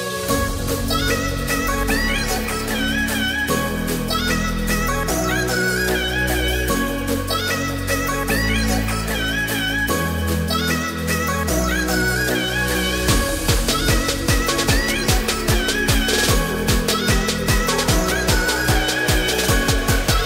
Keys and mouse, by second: 3.5-4.8 middle drag, 6.2 s, 6.6 middle click, 7.9 x, 12.0 middle click, 12.6 ctrl+a, 16.3-18.1 middle drag, 19.1 Tab.